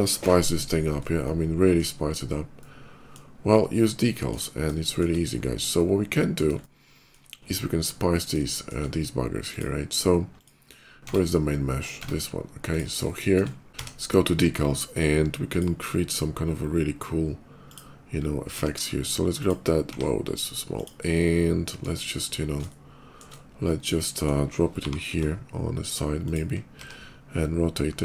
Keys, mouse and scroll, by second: 1.1 shift+middle click, 2.3 shift+middle click, 3.5 shift+middle click, 4.6 middle click, 5.0 middle click, 5.0 scroll up 1, 5.5 middle click, 6.4 shift+middle click, 7.7 shift+middle click, 8.3 shift+middle click, 9.2 shift+click, 10.2 shift+click, 10.6 shift+click, 10.9 Tab, 12.5 click, 12.9 shift+middle click, 13.7 d, 15.4 click, 17.5 click, 19.2 click, 20.6 click, 20.8 middle click, 22.2 scroll down 1, 22.5 shift+middle click, 23.5 shift+middle click, 24.6 g, 26.1 click, 26.6 d, 27.9 click.